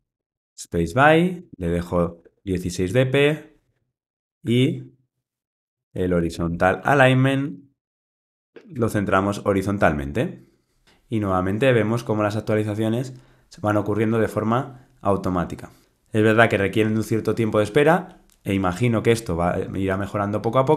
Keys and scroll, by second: 3.7 alt+Return, 6.9 Return.